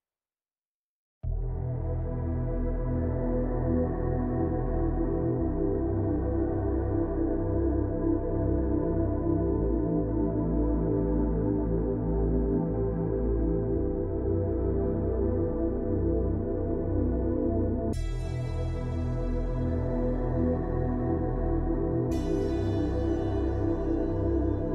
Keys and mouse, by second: 0.3 click, 2.6 click, 4.6 click, 5.4-6.0 shift+middle drag, 6.7 click, 8.1-8.4 shift+middle drag, 8.5 middle click, 9.4-12.9 drag, 13.2 click, 13.7 click, 14.8 ctrl+z, 15.3 click, 16.1 ctrl+z, 17.3 click, 18.0 click, 18.7 ctrl+z, 19.6 click, 20.9 ], 20.9 ], 21.0 click, 21.2 ], 21.5-22.5 drag, 23.7 [.